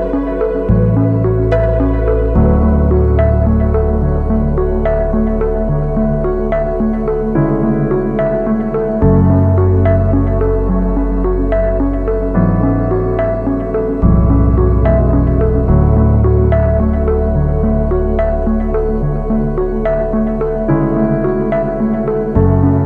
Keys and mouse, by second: 0.0 shift+click, 0.2 shift+click, 0.6 shift+middle click, 2.5 middle click, 3.0 shift+right click, 3.3 shift+right click, 3.6 shift+right click, 4.1 shift+right click, 4.3 middle click, 4.6 ctrl+e, 6.7 a, 7.3 alt+right click, 7.8 ctrl+e, 8.4-10.4 typing, 15.7 shift+middle click, 18.1 shift+middle click, 18.8 a, 19.1 middle click, 20.7 click, 20.8 alt+click, 21.7 middle click, 22.1 shift+middle click.